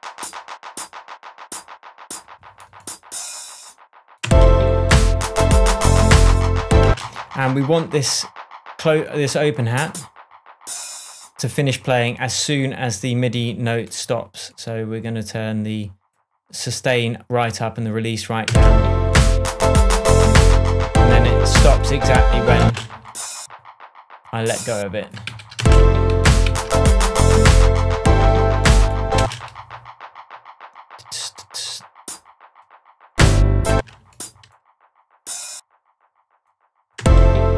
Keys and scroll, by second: 4.2 alt+space, 6.8 space, 7.4 shift+Tab, 18.4 space, 22.6 space, 25.2 super+d, 25.5 super+space, 26.1 super+d, 27.3 shift+super+d, 27.5 shift+super+Tab, 29.1 space, 33.7 space, 36.9 space.